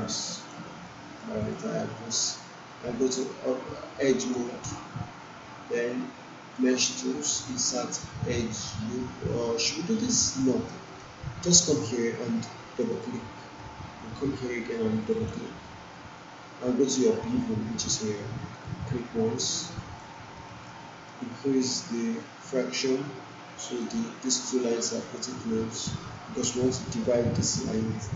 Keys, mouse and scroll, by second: 0.8-1.7 alt+click, 2.7-4.6 right click, 8.8 click, 10.3 click, 10.7 alt+right click, 12.8 click, 15.0 shift+click, 15.4 shift+click, 19.6-20.2 alt+click, 20.3 alt+middle click, 20.9 alt+right click, 21.2-21.8 alt+drag, 22.8-24.1 drag.